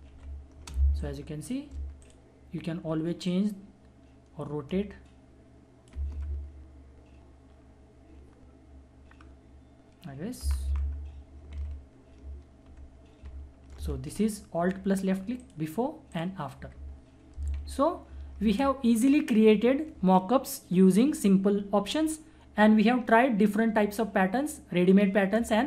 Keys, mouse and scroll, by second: 0.1 ctrl+=, 0.7 space, 1.0 click, 1.2 space, 2.0-5.9 drag, 5.9 Return, 10.4 Return, 10.5 Left, 11.5 ctrl+=, 12.6 -, 13.3 ctrl+-, 15.4 alt+click, 15.4 alt+click, 17.5 ctrl+=.